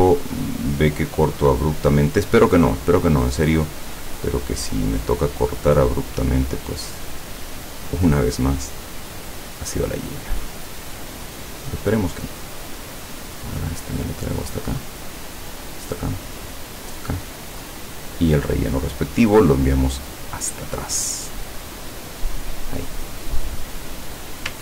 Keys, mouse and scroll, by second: 0.0 click, 2.6 click, 4.2 click, 5.6 click, 7.3 click, 10.4 click, 14.7 click, 15.7 click, 16.6 click, 17.6 click, 18.2 click, 19.5 click, 20.5-21.1 drag, 22.3 click, 23.0 click, 23.9 click.